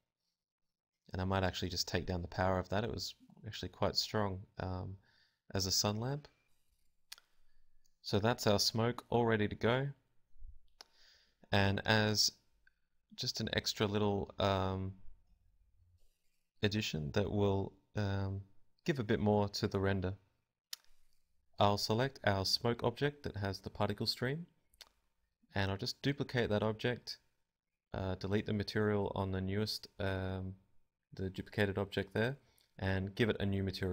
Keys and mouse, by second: 2.1 Escape, 3.7 Escape, 4.9 click, 7.7-13.0 drag, 8.8 KP_0, 10.5 g, 11.9 g, 12.8 z, 14.0 g, 19.2 shift+d, 22.1-33.9 drag.